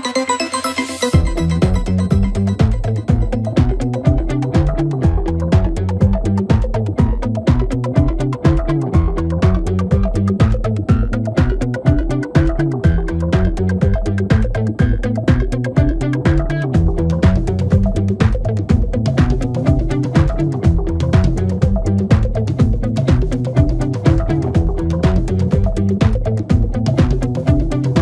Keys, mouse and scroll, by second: 0.2 shift+click, 0.4 shift+click, 1.0 shift+click, 1.1 shift+click, 1.6 shift+click, 1.8 shift+click, 2.5 shift+click, 2.7 shift+click, 3.2 shift+click, 3.3 shift+click, 4.1 shift+click, 4.3 shift+click, 4.8-5.1 scroll down 1, 5.1 middle click, 5.9-6.7 scroll up 1, 6.7 shift+click, 7.6 middle click, 8.0-9.0 scroll up 1, 9.0 ctrl+b, 12.1-13.5 middle drag, 13.5 3, 14.6 e, 15.7 alt+s, 18.6 Tab, 18.9-19.5 scroll down 4, 19.5 KP_1, 20.3-22.4 scroll up 2, 22.4 g, 26.0 ctrl+a.